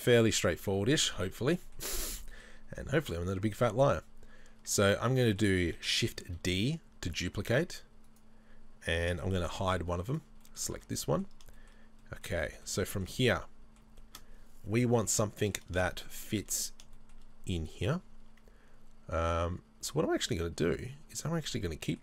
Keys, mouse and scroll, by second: 0.5-2.9 middle drag, 0.7-1.6 scroll down 4, 2.9 right click, 3.5 middle click, 6.2 middle click, 6.3 shift+d, 9.5 h, 10.1 right click, 10.4 middle click, 10.7 Tab, 11.2-20.7 middle drag, 12.0 scroll up 2, 16.3 scroll up 1, 20.7 click, 21.5-22.0 middle drag.